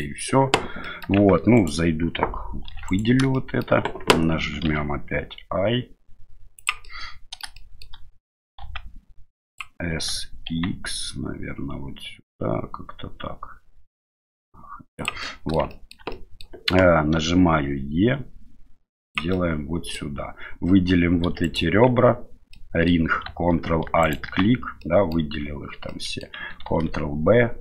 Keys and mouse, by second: 0.8 middle click, 1.2 Tab, 1.6 right click, 2.7 3, 2.9 right click, 3.4 shift+middle click, 4.6 i, 6.9 middle click, 7.6 middle click, 8.6 s, 9.9 s, 15.3 shift+middle click, 16.2 middle click, 17.1 e, 19.4 middle click, 21.2 2, 21.4 right click, 22.5 middle click, 24.0 ctrl+alt+right click, 24.8 middle click, 25.9 middle click, 26.7 ctrl+b.